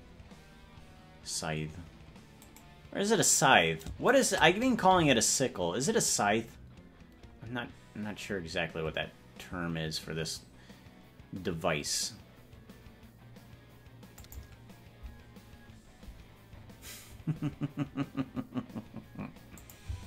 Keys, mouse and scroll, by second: 2.5 right click, 4.3 shift+right click, 5.1 g, 19.7-20.0 drag, 19.9 space.